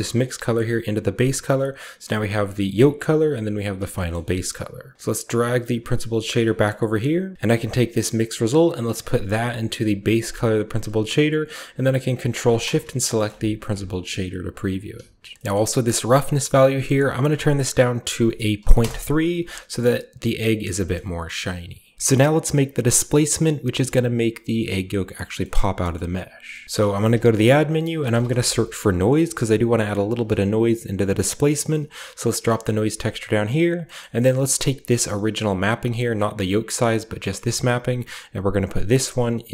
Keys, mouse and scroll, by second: 0.1 click, 1.6 click, 2.3 click, 3.1 click, 3.7 scroll down 1, 3.9-4.9 scroll up 1, 4.0 a, 4.9-6.3 drag, 5.1-6.3 scroll up 1, 6.6-7.3 scroll up 1, 7.3-8.8 scroll up 1, 7.8 drag, 8.8-9.9 drag, 10.2 click, 12.2 ctrl+click, 13.2-14.4 ctrl+scroll up 1, 13.3 ctrl+shift+click, 13.8 click, 14.4-15.1 scroll up 1, 14.6 click, 14.8 typing, 15.4-16.6 scroll up 1, 15.5-16.6 middle drag, 16.6-18.2 drag, 16.6-18.2 scroll up 1, 18.2 typing, 18.7 Return, 20.1 middle drag, 20.2 click, 20.8 shift+middle click, 21.3-21.9 shift+middle drag, 25.5 middle click, 25.6-26.3 scroll up 2, 25.9 middle click, 26.3-27.2 scroll down 3, 26.6 shift+middle click, 26.9 typing, 27.2 click, 27.9-28.3 typing, 30.0 Return, 32.1-33.7 drag, 32.7-33.7 scroll up 1, 33.7 scroll up 1, 33.9 middle click, 33.9 scroll down 1, 34.2 middle click, 34.9 click, 35.4 click, 38.6-39.5 drag.